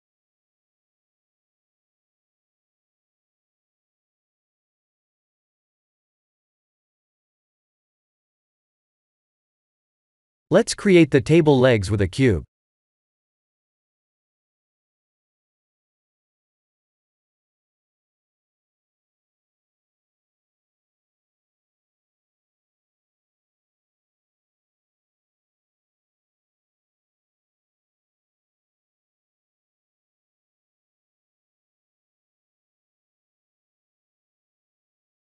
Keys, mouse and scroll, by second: 0.4 click, 3.3 Tab, 4.2 click, 4.6-5.1 scroll down 2, 5.1 click, 6.0 middle click, 6.2 middle click, 6.9-8.1 scroll down 3, 9.6 middle click, 10.4 click, 10.8 shift+a, 13.5 ctrl+z, 14.2 shift+a, 16.7 s, 19.1 KP_7, 20.1-21.0 scroll up 2, 21.0 s, 21.8 g, 28.8 middle click, 30.0 s, 34.9-35.2 scroll down 2.